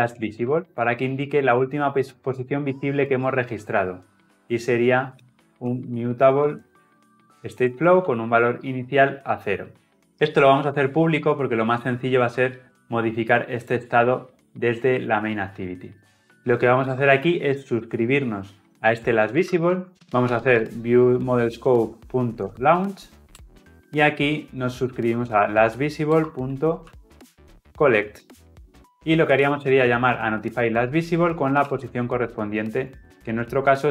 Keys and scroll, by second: 1.4 Return, 7.6 Return, 12.4 Delete, 21.3 Return, 26.1 Return, 30.6 Return.